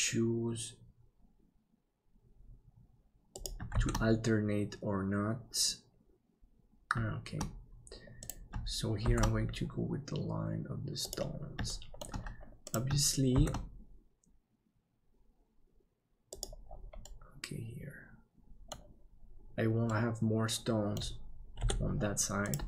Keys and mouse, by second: 3.7 shift+d, 9.0 shift+d, 11.6 middle click, 13.3 shift+d, 17.1-18.7 middle drag, 19.9-20.9 middle drag, 21.6 KP_7.